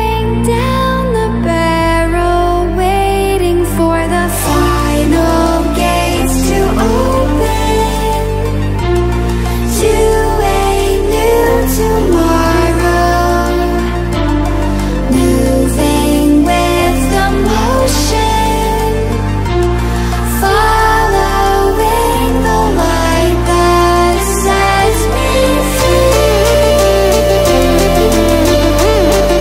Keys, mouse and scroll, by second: 1.1 click, 3.6 click, 6.8 click, 8.5 right click, 10.1-26.6 drag, 29.1-29.4 scroll down 1.